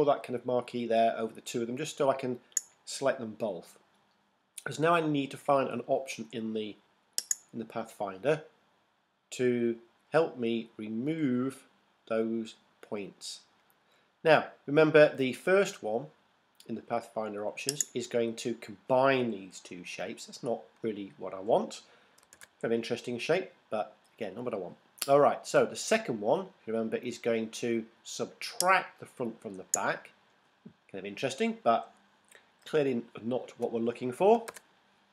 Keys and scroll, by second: 22.4 super+z, 34.5 super+z.